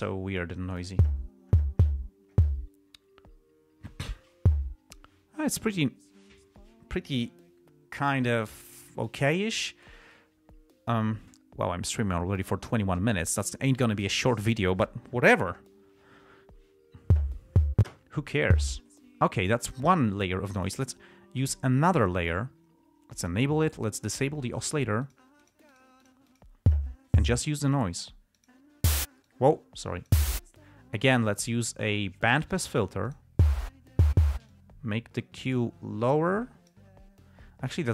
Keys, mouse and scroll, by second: 0.7-1.3 drag, 21.8 click, 23.6 click, 24.9 click, 25.4 click, 25.9 click, 28.0 click, 28.7 click, 29.6 click, 32.6 click, 33.4 click, 34.8-37.3 drag.